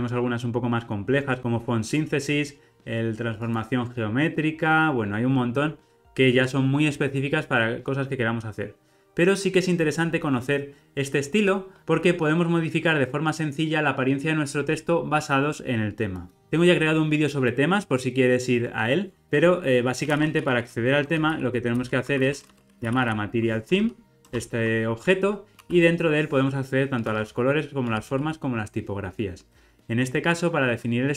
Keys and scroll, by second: 9.0 alt+super+[, 24.3 Return.